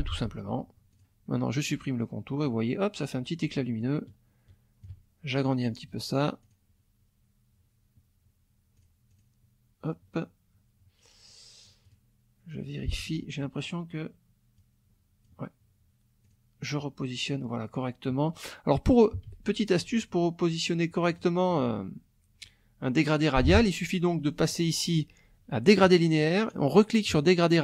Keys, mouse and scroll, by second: 1.0 click, 1.6 click, 2.4 click, 3.8-5.0 ctrl+shift+drag, 6.4 click, 8.8 click, 9.1 click, 11.9 click, 12.6 click, 14.6 click, 16.3 click, 16.6 click, 19.3 ctrl+z, 21.1 click, 21.5 click, 25.8 click, 27.1 click.